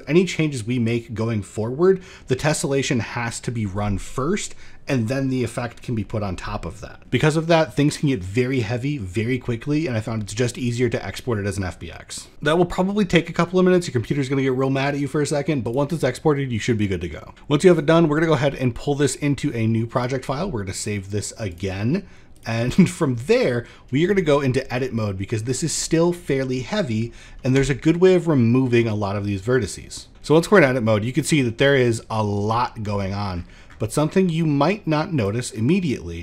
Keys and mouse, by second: 15.1 click, 18.5-19.6 drag, 24.7 middle drag, 25.3 shift+middle click, 25.7 middle click, 26.1 shift+middle drag, 30.1 shift+middle click, 30.5 middle click, 31.5 middle click, 32.5 shift+middle click, 33.6 middle click, 34.7-35.8 drag.